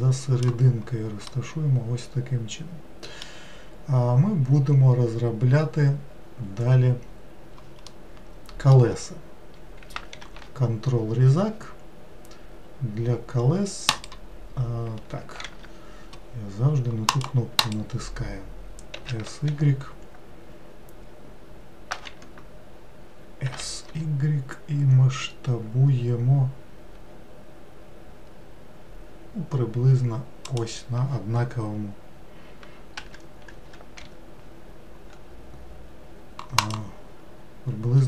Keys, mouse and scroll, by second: 1.3-4.4 middle drag, 7.9-10.2 middle drag, 10.2 ctrl+r, 15.4 ctrl+r, 18.9 s, 23.4 s, 33.0 g.